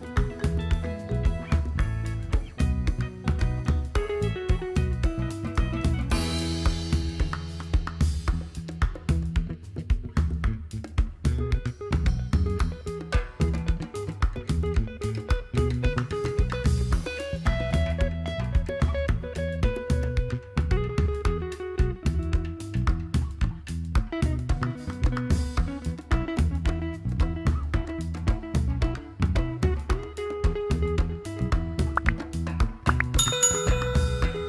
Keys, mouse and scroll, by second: 23.7-28.5 drag, 33.3 click.